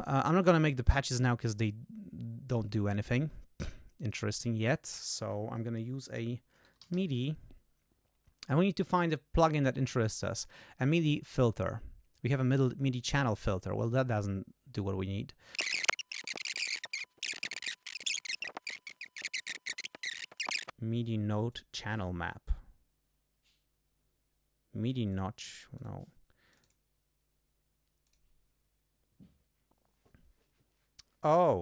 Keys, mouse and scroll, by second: 2.4 right click, 4.2 click, 5.9-7.3 typing, 15.6 click, 15.9-16.3 scroll down 2, 16.3 click, 16.6 scroll down 2, 16.7 right click, 17.7 click, 17.9 click, 18.0 Right, 18.0 ctrl+a, 18.0 ctrl+BackSpace, 18.7 click, 18.9-19.3 scroll down 4, 19.3 click, 19.3 click, 19.7 click, 20.2 click, 21.4 click, 24.2 scroll up 2, 25.0 click, 25.7 click, 26.5 click, 28.0 click.